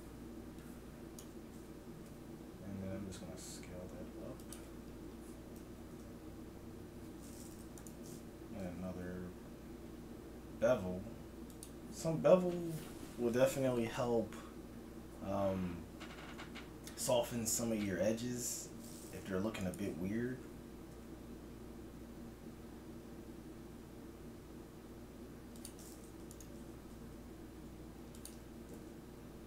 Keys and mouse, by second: 2.0 s, 4.8 a, 5.6 z, 7.8 click, 8.6 ctrl+b, 19.6-21.6 right drag, 20.8 s, 26.3-27.5 drag, 27.5 right click, 27.5 s, 28.8 ctrl+b.